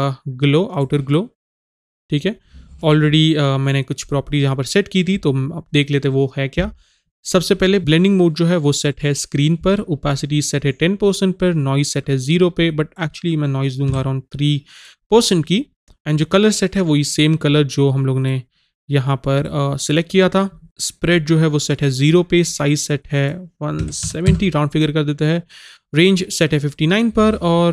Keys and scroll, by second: 14.0 KP_3, 23.8 KP_1.